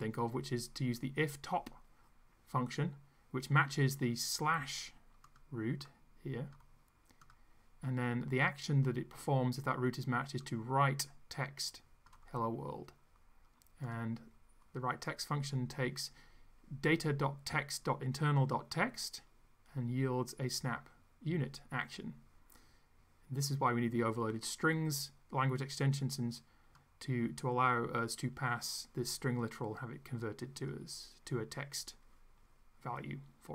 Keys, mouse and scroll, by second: 5.3 click, 5.9 click, 7.3 click, 10.4-12.3 drag, 13.9 click, 26.9-30.9 drag.